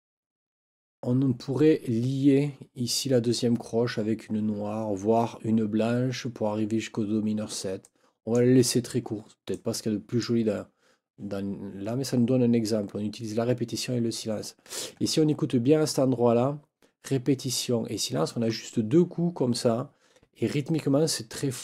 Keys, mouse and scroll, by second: 7.8 click, 9.5 click.